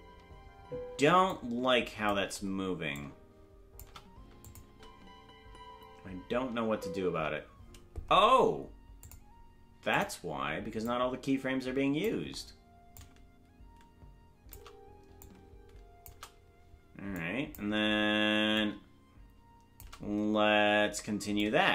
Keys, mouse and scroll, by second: 0.9 space, 1.3 click, 2.9 click, 4.4 click, 4.6 space, 9.0-10.0 drag, 9.0 space, 10.8-12.0 drag, 12.9-14.5 drag, 15.2 click, 17.1 click, 18.5-19.8 drag, 21.3-21.7 drag.